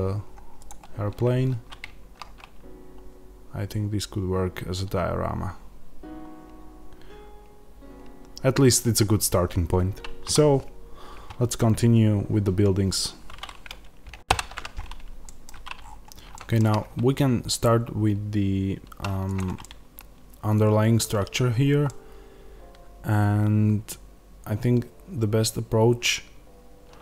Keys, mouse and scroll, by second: 15.1-19.2 middle drag, 15.7-16.2 scroll up 1, 19.2 click, 19.5-27.0 middle drag.